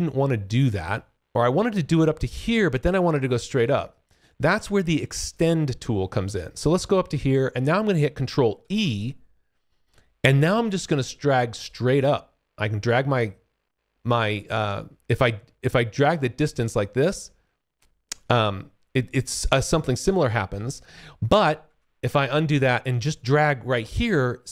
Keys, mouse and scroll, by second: 8.8 ctrl+e, 11.6 click, 21.6 ctrl+z, 23.1 click.